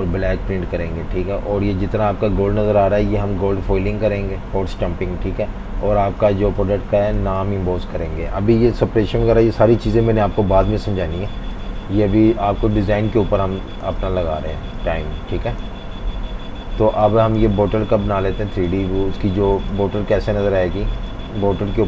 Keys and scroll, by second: 6.3-8.1 typing, 10.7 super+-, 10.9 super+-, 11.1 super+-, 11.7 super+-, 12.8-15.1 typing, 16.2 F19, 16.9 typing, 19.4 super+3, 20.1 super+3, 21.4 super+3.